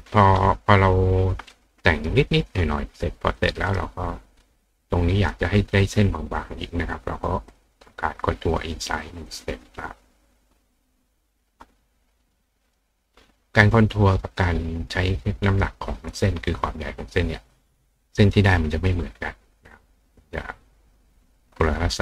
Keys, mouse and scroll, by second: 1.5 click, 1.8 click, 3.4 click, 3.7 right click, 4.8 click, 7.5 click, 8.8 click, 9.3 click, 12.7 click, 17.6 click.